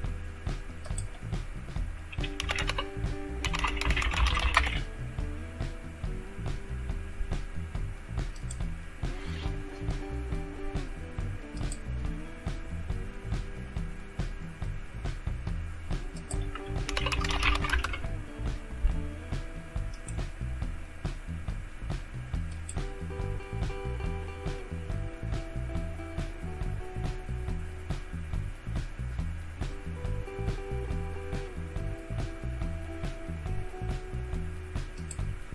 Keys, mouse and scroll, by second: 0.9 click, 2.1-5.0 typing, 8.4 click, 11.6 click, 16.2 click, 16.6-17.9 typing, 20.1-22.1 drag, 22.5-23.5 drag, 23.5 scroll down 2, 25.6-27.1 scroll down 1, 27.1-28.6 scroll down 1, 28.6-29.7 scroll down 1, 29.7-31.9 scroll down 2, 31.9-33.2 scroll down 1, 34.9 click.